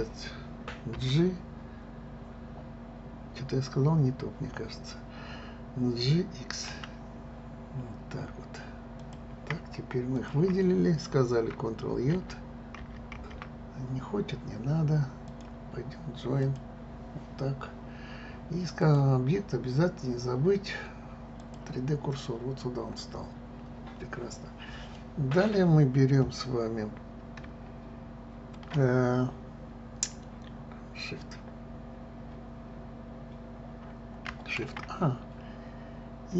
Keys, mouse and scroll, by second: 0.9 g, 10.1 shift+click, 12.1 alt+j, 12.7 alt+j, 15.2-18.2 drag, 18.8-21.8 drag, 23.0 scroll down 1, 24.9-28.0 middle drag.